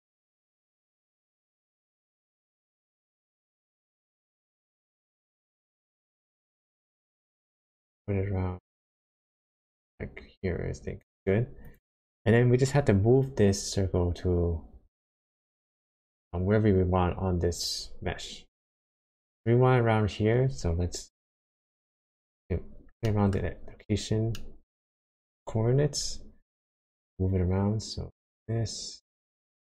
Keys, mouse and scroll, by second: 1.7 shift+click, 11.6 click, 21.5 shift+middle click, 22.3-22.8 scroll up 3, 23.0 shift+middle click, 23.4-24.2 shift+scroll up 2, 24.3 shift+middle click, 26.5 shift+click.